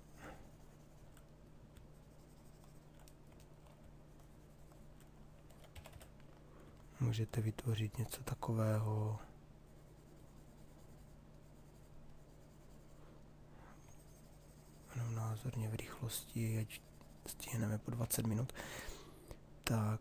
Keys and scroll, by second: 5.3 b, 6.0 h.